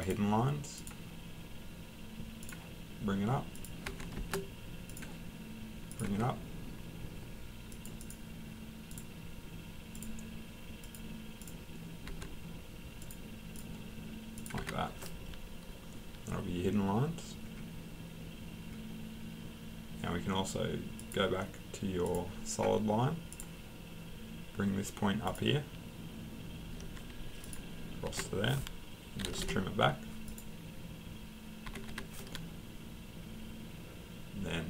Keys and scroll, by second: 3.9 Escape, 6.1 Escape, 12.1 Escape, 14.6 Escape, 28.0 Escape, 28.9-29.8 typing, 31.6 Escape, 31.9 Escape.